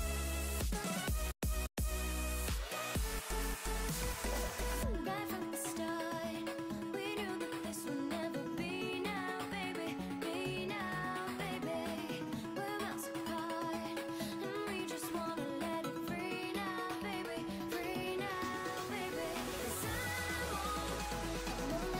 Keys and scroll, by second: 11.4 s.